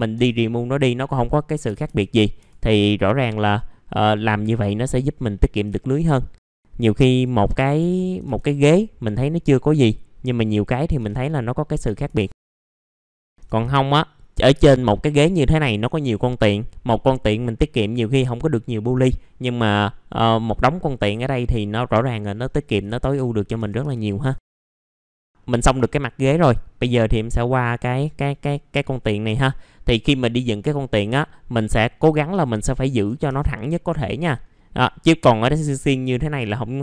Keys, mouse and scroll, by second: 0.1 BackSpace, 1.6 typing, 2.4 F4, 3.1-3.7 scroll up 1, 3.7-4.3 scroll down 1, 4.4 alt+middle click, 4.9 scroll up 1, 5.3 alt+middle click, 6.2-6.9 scroll up 2, 7.1 click, 9.4 click, 10.9 BackSpace, 12.3 click, 12.6 scroll down 1, 13.0 middle click, 13.2 scroll down 1, 13.8-14.4 scroll down 1, 14.4 middle click, 14.8-15.5 scroll up 1, 15.5 middle click, 20.3-21.2 scroll down 1, 21.2 middle click, 22.5 scroll down 1, 23.4 scroll up 1, 23.5 F4, 24.6 scroll down 1, 24.7 middle click, 26.5-26.9 scroll up 1, 26.9 middle click, 28.0 click, 29.5 scroll down 1, 31.5 middle click, 31.6-32.3 scroll down 1, 32.4 shift+click, 33.6 middle click, 34.1-34.5 scroll up 1, 34.5 middle click, 34.9-36.3 scroll up 1, 36.3-36.8 scroll down 1.